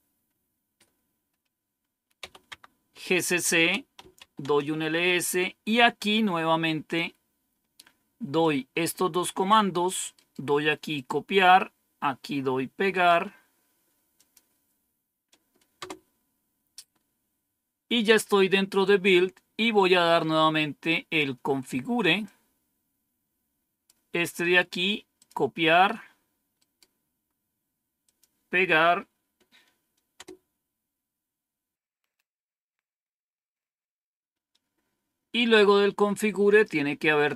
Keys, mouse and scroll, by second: 0.8 typing, 2.1 typing, 2.4 Tab, 3.4 Return, 3.6-4.4 typing, 8.3-9.4 drag, 10.1 right click, 10.8 right click, 10.9 click, 13.0 right click, 14.1 click, 15.7 Return, 19.4-20.1 scroll down 1, 22.2-23.8 drag, 24.3-25.4 right drag, 25.1 click, 26.4 right click, 27.9 click, 30.1 Return, 35.1-35.8 scroll down 1, 35.8-36.4 scroll down 1, 36.4-37.3 scroll down 1.